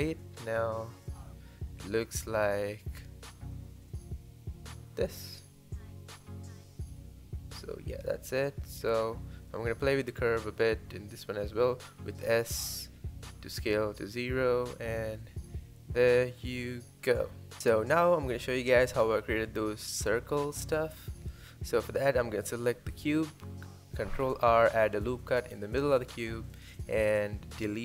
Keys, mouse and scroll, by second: 0.2-0.5 scroll up 1, 0.9 click, 1.2 click, 2.1 click, 3.7 click, 4.5 x, 5.4 click, 6.2 x, 6.5 click, 7.9-9.0 drag, 9.0 s, 10.2 click, 10.6 click, 11.6 g, 13.4 click, 13.6 space, 15.6 scroll down 1, 15.8-17.0 middle drag, 17.0 scroll up 1, 17.2 space, 17.7 click, 17.9 scroll down 1, 18.1-18.6 shift+middle drag, 18.6 scroll up 1, 18.8-19.1 shift+middle drag, 19.1 click, 19.3-19.9 middle drag, 19.9 scroll up 2, 20.1-20.7 shift+middle drag, 20.7 Tab, 22.0 ctrl+r, 23.2 middle click, 23.6 KP_7, 23.8 scroll up 1, 24.0 shift+middle click, 24.3 KP_1, 24.5 KP_3, 24.8 shift+middle click, 24.9 scroll up 2, 25.1 shift+middle click, 25.4 click, 25.7 x, 25.9 click, 26.1 alt+z, 26.3 click, 26.8 click, 27.1-27.8 typing, 27.3 click.